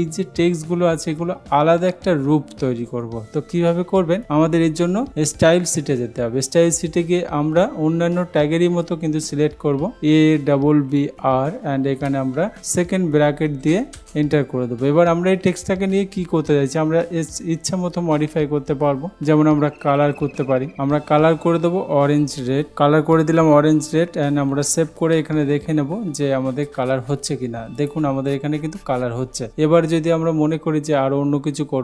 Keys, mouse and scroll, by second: 5.7 click, 10.0-11.6 typing, 13.6 shift+[, 14.1 Return, 22.7 Down, 22.7 Return, 25.0 ctrl+s, 27.9-28.9 drag.